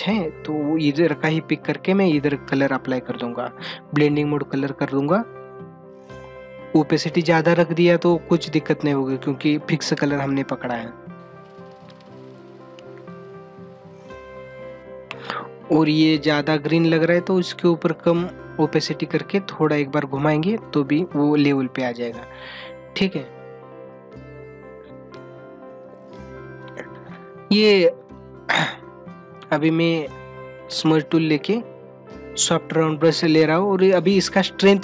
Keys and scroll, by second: 22.4 ctrl+=, 28.1 ctrl+-, 32.9 ctrl+-.